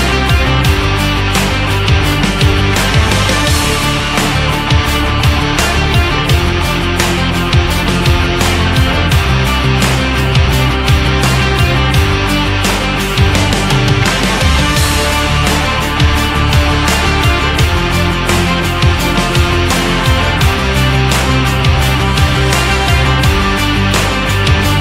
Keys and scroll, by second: 0.3 Up, 2.6 Down, 4.8 Up, 5.5 Down, 7.3 Down, 7.8 Up, 8.3 Down, 9.2 Up, 10.0 Left, 10.8 Up.